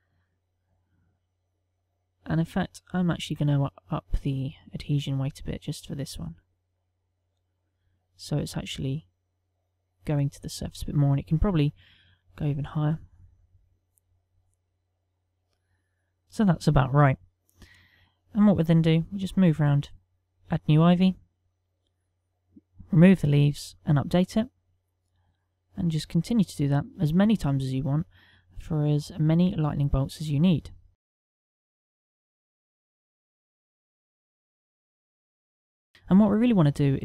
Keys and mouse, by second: 0.1 click, 1.6 middle click, 4.2 middle click, 5.4 click, 6.5 click, 7.2 middle click, 8.5 click, 9.4 middle click, 11.6 middle click, 13.7 click, 14.0 click, 14.7 middle click, 15.9 click, 20.4 right click, 21.7 click, 23.7 click, 25.3 click, 27.1 right click, 31.5 click, 32.1 click, 32.4 click, 32.8 right click, 33.4 click, 34.4 click, 34.6 click, 35.2 right click, 35.5 click.